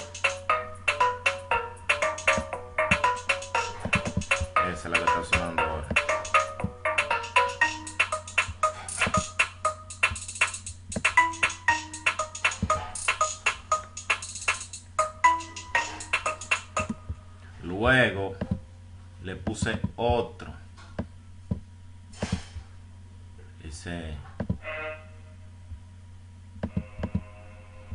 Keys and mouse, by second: 1.6 F1, 7.3 F1, 7.6 F1, 8.0 F1, 8.5 F1, 21.6 F1, 23.6 click.